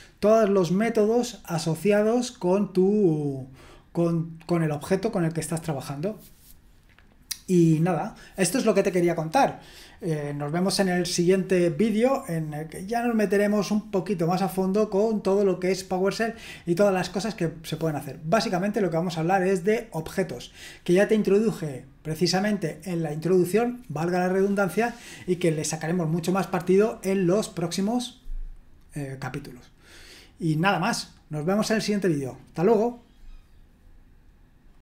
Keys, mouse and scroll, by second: 34.7 click.